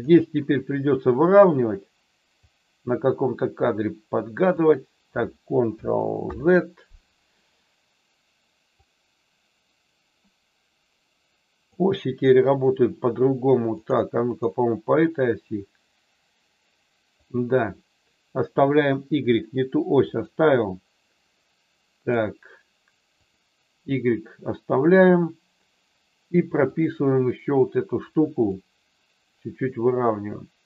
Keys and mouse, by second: 2.4-4.5 drag, 6.2 ctrl+z, 8.7-11.7 drag, 13.7 click, 14.3 click, 15.6-17.2 drag, 20.0 click, 21.9 click, 26.7 click, 28.4-30.6 drag.